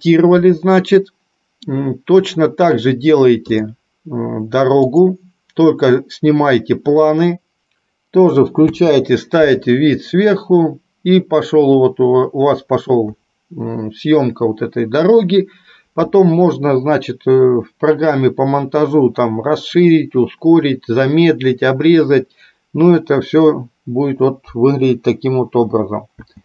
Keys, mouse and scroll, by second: 5.2-7.7 drag, 8.9 space.